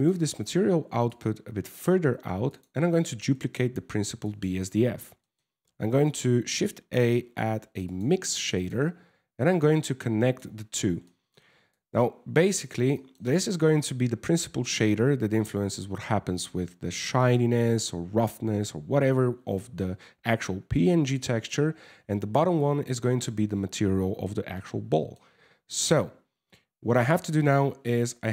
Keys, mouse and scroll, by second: 0.7 click, 2.1 click, 2.9 shift+d, 4.8 middle click, 5.2 shift+a, 9.2 click, 10.7 middle click, 11.4 click, 12.6 middle click, 20.8 middle click, 22.2 click, 24.2 middle click, 26.7 middle click, 27.6 click.